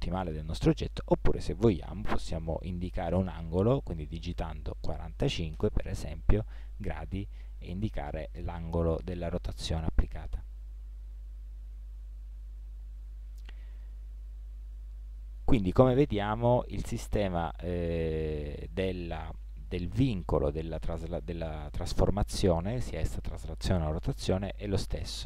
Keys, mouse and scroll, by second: 7.0-12.2 middle drag, 12.2 ctrl+z, 17.2-25.2 middle drag.